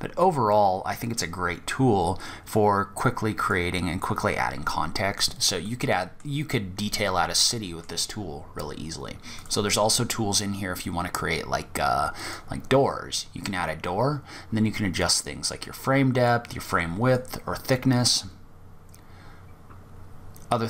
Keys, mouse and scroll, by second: 3.6-4.8 scroll down 8, 4.4-5.3 scroll up 4, 4.8 middle click, 6.0-6.5 scroll down 2, 6.3-6.7 scroll up 2, 6.7 middle click, 7.3-7.6 scroll down 2, 7.6-8.5 scroll up 7, 8.5 click, 11.4 click, 12.2-13.1 scroll up 5, 13.1-14.0 scroll up 2, 14.2 click, 16.3 click.